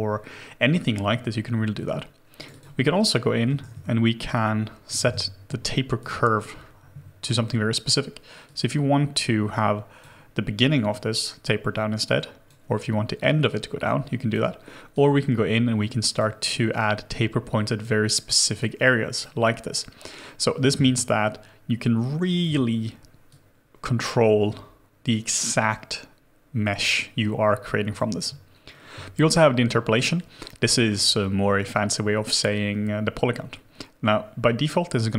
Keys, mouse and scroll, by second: 2.5 double click, 3.6 Return, 4.9 1, 5.0 Return, 6.4-8.5 scroll down 1, 20.8 alt+click, 28.5 scroll, 28.5-30.5 scroll down 1, 31.4-33.4 scroll down 1.